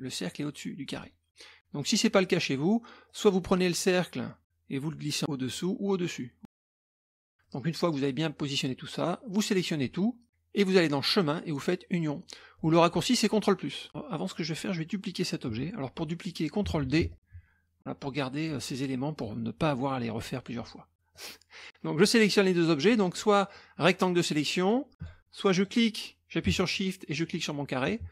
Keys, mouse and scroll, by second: 0.3 click, 0.9 click, 1.5-3.1 middle drag, 3.1 click, 4.0-5.1 drag, 5.5-6.6 drag, 7.1 scroll down 1, 7.4 click, 8.6-10.1 drag, 11.1 click, 12.6 click, 13.8 middle click, 13.8 scroll up 1, 13.9 click, 16.8 ctrl+d, 17.1-18.6 drag, 19.6-20.8 drag, 21.1 click, 22.3-24.8 drag, 25.0-26.1 drag, 27.1 shift+click.